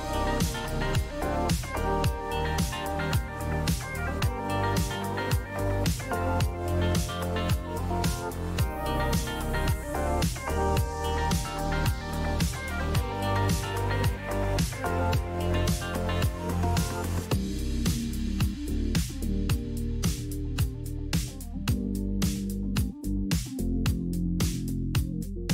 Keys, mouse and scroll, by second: 2.4 click, 2.6-3.5 typing, 5.5 click, 8.2 click, 8.7 click, 9.7 click, 10.9 shift+click, 12.2 ctrl+g, 15.4-16.8 drag, 17.0 click, 18.8 click, 20.3 click, 22.2 click, 22.5-23.4 typing.